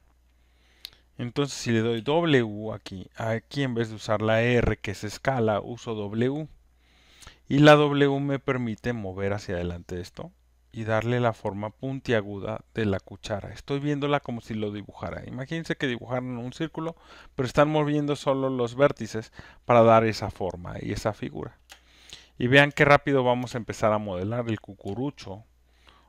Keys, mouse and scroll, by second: 1.9 w, 4.4-8.6 drag, 4.4 w, 9.4 click, 10.2 click, 11.9 click, 19.1 click, 22.4 click, 24.2 space, 25.7 alt+right click.